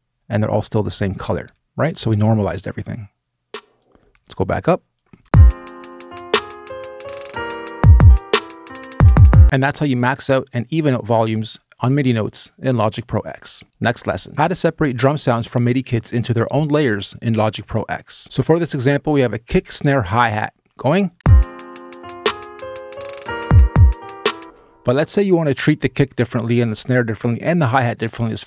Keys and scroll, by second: 5.0 space, 21.0 space, 24.2 space.